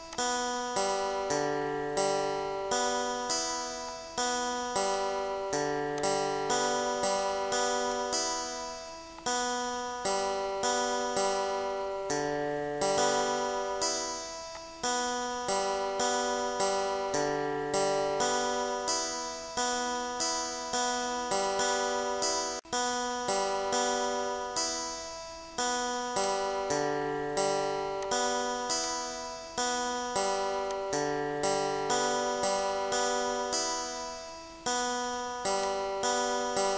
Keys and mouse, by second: 2.4 click, 3.0 click, 4.6 click, 9.3 ctrl+click, 10.7 click, 11.3 click, 12.7 click, 14.2 click, 15.1 ctrl+shift+click, 16.2 shift+click, 16.9 click, 17.8 click, 18.3 click, 18.8 click, 19.6 click, 20.1 click, 20.7 ctrl+shift+click, 23.7 ctrl+shift+click, 25.8 click, 26.4 click, 27.6 click, 29.2 click, 35.6 click.